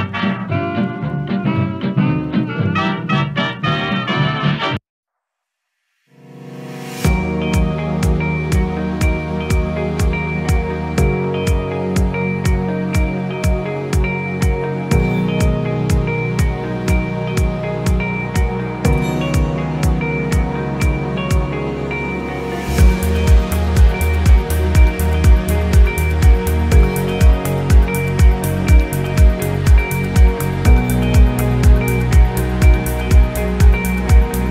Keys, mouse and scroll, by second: 3.3 shift+click, 4.8-10.2 shift+drag, 11.5-12.3 drag, 12.8 Left, 13.0 click, 16.2 click, 19.1 scroll down 1, 20.0 click, 22.6 click, 22.9 click, 24.3 click, 25.6 click, 26.3 click, 28.8-30.7 drag, 30.7-31.2 scroll up 2, 32.1 click, 33.8 click.